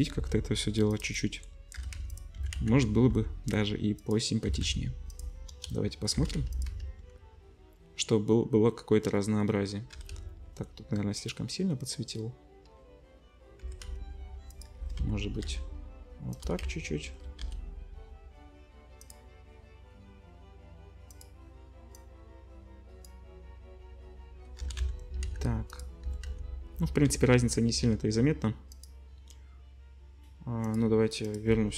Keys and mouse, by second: 0.1 g, 1.7 g, 2.4 s, 4.5 s, 5.5 middle click, 5.5 KP_0, 6.1 g, 6.7 z, 6.9-8.1 middle drag, 9.7-10.8 middle drag, 9.9 g, 13.6 g, 13.7 click, 14.3 middle click, 14.8 g, 14.8 click, 15.4-17.4 middle drag, 16.4 r, 17.8 click, 18.6-21.1 middle drag, 21.1 drag, 21.3 middle click, 22.0-25.8 drag, 24.6 g, 25.8-30.6 middle drag, 26.0 r, 30.6 click, 30.7 middle click, 31.3-31.7 drag.